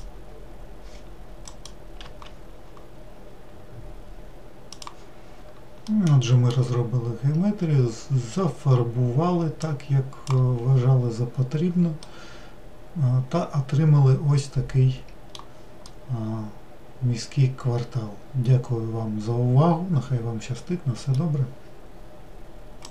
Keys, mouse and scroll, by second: 1.8 click, 2.1 w, 6.1-9.9 middle drag, 9.9-11.4 drag, 11.4-12.2 scroll down 1, 12.2-22.9 middle drag.